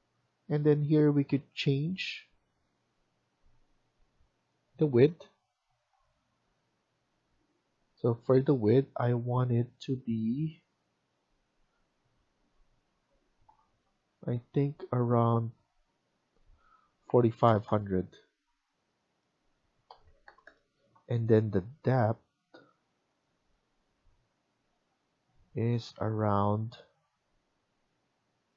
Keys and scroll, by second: 17.3-18.0 typing, 19.6-20.3 typing.